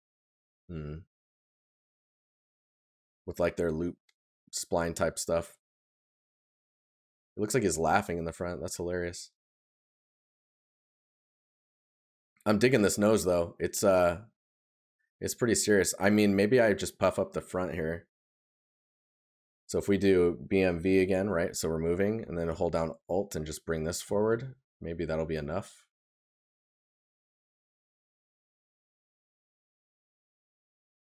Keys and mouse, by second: 5.0 right click, 8.5 right click, 11.9 right click, 15.9 right click, 26.9 right click.